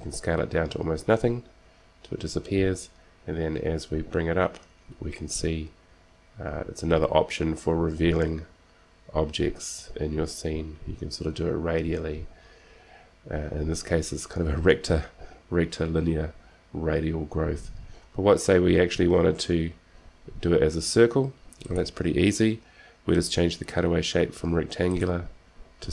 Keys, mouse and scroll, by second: 0.1 s, 25.1-25.9 drag.